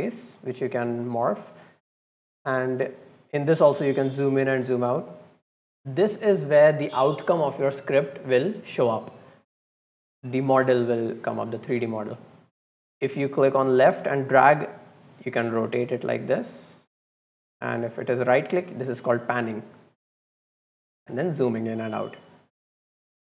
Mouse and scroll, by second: 0.2 click, 0.7 click, 2.2-2.7 scroll up 2, 2.9 scroll down 2, 3.4-4.0 scroll up 4, 4.1-4.7 scroll down 4, 5.1 scroll up 2, 5.6 scroll down 1, 10.0 scroll down 1, 10.3 scroll up 1, 10.7-11.4 right drag, 11.7-12.5 drag, 13.2-15.9 drag, 16.2-17.2 drag, 17.5-18.4 right drag, 18.6-19.1 right drag, 19.2 right click, 19.7 right click, 20.1 right click, 20.7 scroll down 1, 20.9 scroll up 1, 21.2-21.6 scroll down 2, 21.6 scroll up 1, 21.8 scroll down 1, 22.6-23.3 right drag.